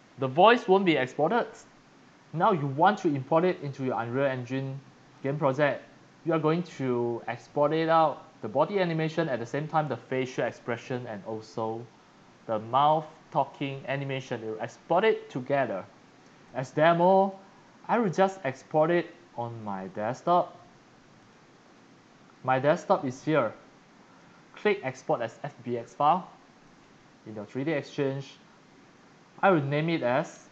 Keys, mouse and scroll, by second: 0.0 click, 3.5 click, 5.1 click, 9.7 click, 16.4 click, 18.2 click, 19.0 click, 19.2 click, 19.8 click, 21.1 click, 22.6 click, 24.1 click, 26.6 click, 29.6 click.